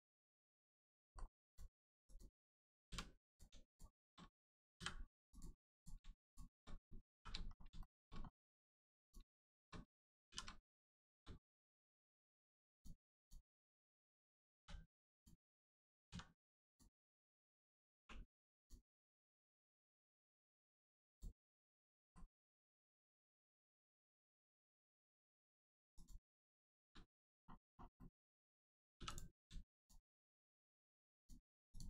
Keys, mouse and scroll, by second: 0.3 shift+middle click, 1.4 click, 1.5 click, 3.7 shift+click, 4.8 m, 5.3 click, 6.2 shift+click, 7.2 shift+r, 7.4 scroll down 1, 7.8 shift+middle click, 8.1-9.0 scroll up 1, 9.0 click, 9.4 shift+click, 10.3 shift+r, 10.6 scroll down 1, 10.9 shift+middle click, 12.2 middle click, 12.7 click, 13.2 shift+click, 14.6 click, 15.1 click, 18.6 click, 19.0 middle click, 19.8 scroll up 1, 21.1 shift+click, 21.7 middle click, 22.1 shift+middle click, 22.2 shift+middle click, 24.8 m, 26.0 click, 26.4 shift+middle click, 27.0 middle click, 27.1 middle click, 27.7 scroll down 1, 28.0 middle click, 29.0 3, 29.1 click, 29.8 shift+click.